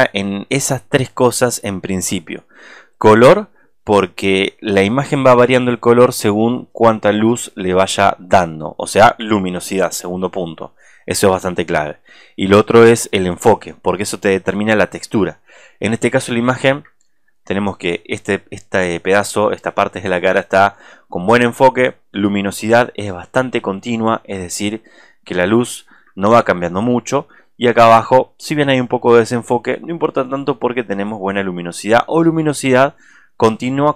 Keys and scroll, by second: 16.8 alt+space, 17.4 ctrl+space, 20.5 ctrl+space.